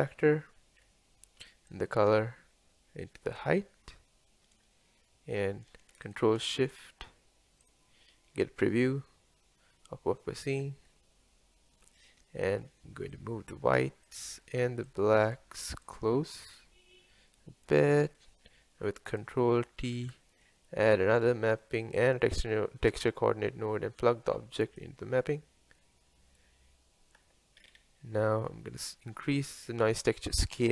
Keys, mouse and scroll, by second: 8.5 ctrl+shift+click, 13.2-18.1 drag, 18.1 scroll down 2, 18.2-19.1 middle drag, 19.1 click, 20.0 ctrl+t, 20.8-24.8 middle drag, 24.8-26.9 drag, 26.9-30.7 middle drag.